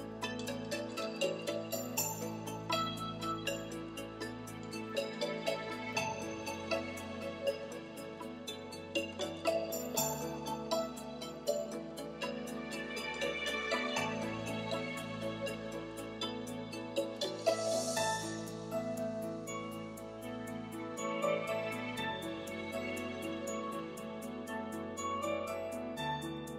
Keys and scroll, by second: 0.2 ., 1.0 4, 13.3 Left, 13.8 BackSpace, 18.8-20.1 typing.